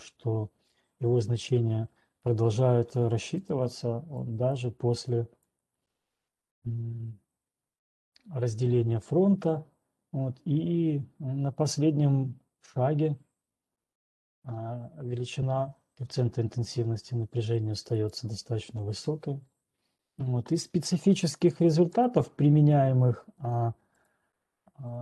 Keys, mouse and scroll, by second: 2.9 click, 3.9 click, 4.9 click, 5.9 click, 18.3 click, 18.8 right click, 22.0 click, 24.5 click.